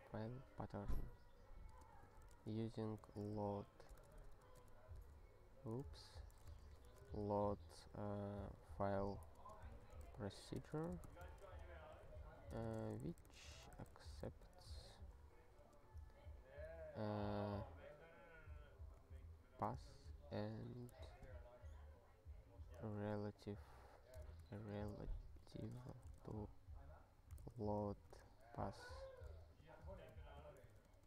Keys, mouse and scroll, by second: 1.5-4.1 typing, 6.3-7.8 typing, 8.4 alt+/, 9.3-14.2 typing, 14.6 alt+q, 15.6 space, 18.6-21.1 typing, 22.4-28.3 typing, 29.3 alt+b, 29.6 alt+b, 30.7 alt+f, 30.9 alt+f.